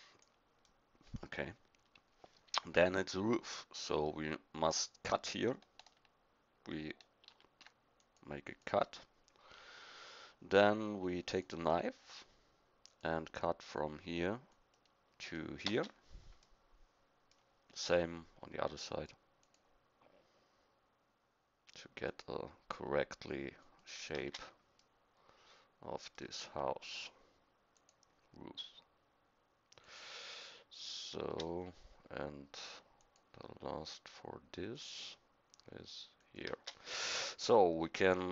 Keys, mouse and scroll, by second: 7.2 ctrl+r, 11.2-15.7 drag, 27.7-31.2 drag, 33.0-36.5 drag.